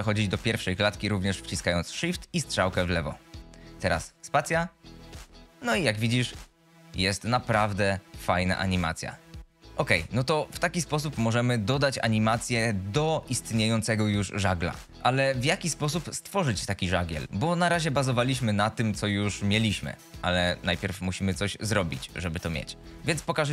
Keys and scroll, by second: 3.1 shift+Left, 4.3 space, 9.7 space, 9.9 z, 14.9 space, 23.1 space.